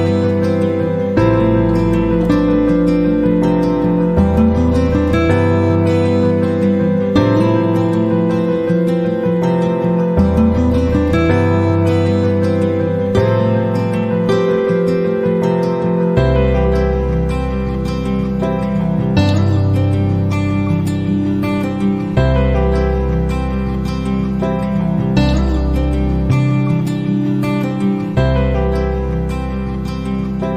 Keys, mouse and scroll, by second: 2.1 click, 3.6 click, 4.8 click, 6.4 KP_1, 6.7 KP_0, 7.2 KP_Enter, 7.9 KP_1, 8.1 KP_5, 8.4 KP_0, 8.7 KP_Enter, 10.7 click, 11.6 ctrl+d, 13.5 click, 16.0 click, 17.7 click, 18.8 KP_3, 19.1 KP_0, 19.3 KP_Enter, 20.9 click, 21.6 click, 25.0 click, 27.1 click.